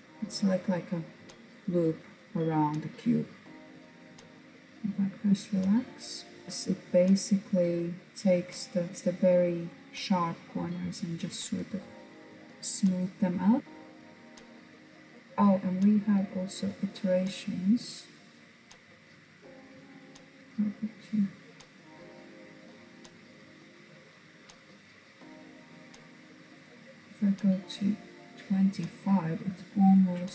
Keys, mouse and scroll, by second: 1.3-3.9 scroll down 1, 3.9-4.7 drag, 4.7-5.7 middle drag, 5.7-6.3 scroll up 4, 6.3-12.1 middle drag, 12.3-13.6 middle drag, 13.6-15.7 drag, 16.8-20.1 drag, 20.1-22.1 middle drag, 22.1 scroll up 1, 23.7-26.1 drag, 26.1-29.4 middle drag, 29.4 alt+z, 29.8-30.3 middle drag.